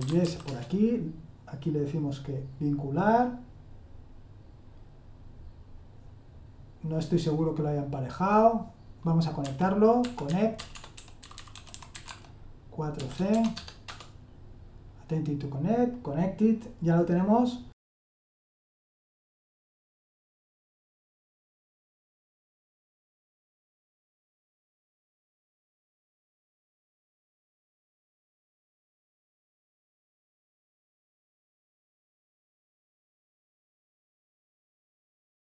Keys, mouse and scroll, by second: 0.0-0.7 typing, 9.4-14.0 typing, 22.1-24.2 typing.